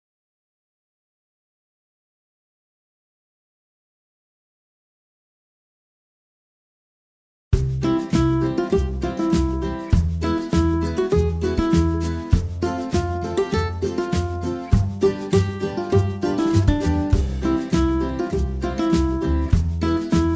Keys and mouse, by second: 0.0-3.7 typing, 4.7 ctrl+z, 4.9 g, 5.1 a, 5.2 g, 5.4 alt+h, 5.7 ctrl+z, 5.9 a, 6.9 h, 8.2-13.9 typing, 13.8 alt+h.